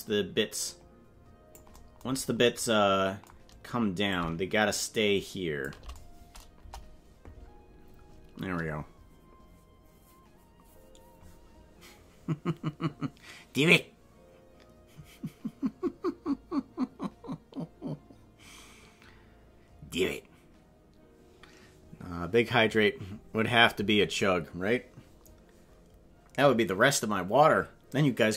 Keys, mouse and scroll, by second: 2.1 scroll down 4, 4.1-5.6 shift+drag, 6.6 KP_0.